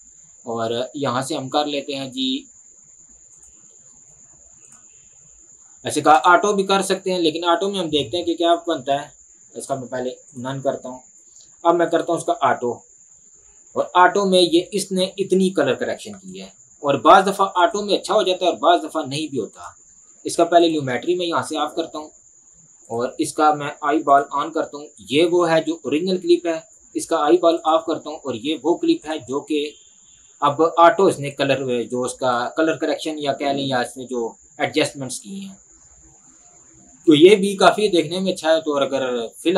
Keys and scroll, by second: 21.8 Delete, 30.0 space.